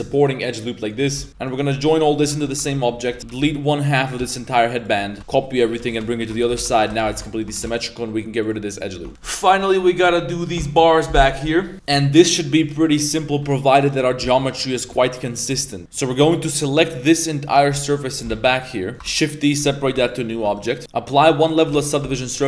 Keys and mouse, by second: 1.1 Tab, 1.2 middle click, 1.3 z, 1.5 shift+right click, 2.3 ctrl+j, 2.6 Tab, 3.1-5.2 typing, 3.4 ctrl+r, 5.1 shift+middle click, 6.3-7.6 typing, 7.3 alt+right click, 9.0 Tab, 11.7 middle click, 12.4 right click, 12.8 Tab, 12.9 middle click, 13.3 3, 13.9 right click, 14.1-14.8 middle drag, 15.3 ctrl+shift+right click, 15.6 middle click, 15.8 z, 15.8 2, 16.1 3, 16.2 right click, 16.6-17.6 middle drag, 18.1 ctrl+shift+right click, 18.3 z, 18.3 middle click, 18.9 z, 19.2 shift+d, 19.9 p, 20.3 Tab, 20.5 right click, 21.4 click, 21.7 ctrl+a, 22.0 Tab.